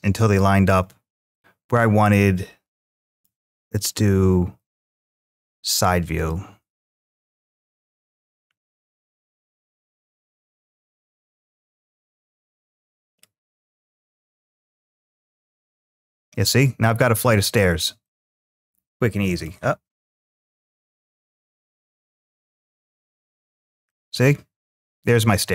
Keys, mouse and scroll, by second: 1.1-3.1 middle drag, 8.0-10.4 drag, 10.9-13.0 drag, 13.8-17.0 drag, 17.8-19.3 middle drag, 20.6-23.2 drag, 23.7-25.5 middle drag.